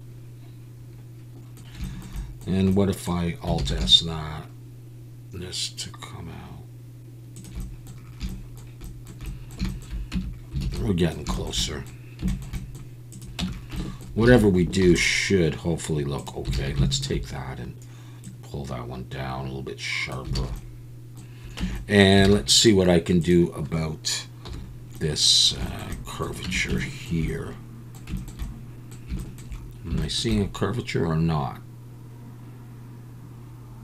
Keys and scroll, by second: 3.6 alt+s, 10.1 Tab, 10.6 alt+a, 13.4 Tab, 14.3 alt+a, 14.8 ctrl+r, 16.5 alt+a, 20.4 alt+a, 21.6 Tab, 22.2 alt+a, 24.5 /, 26.4 Tab.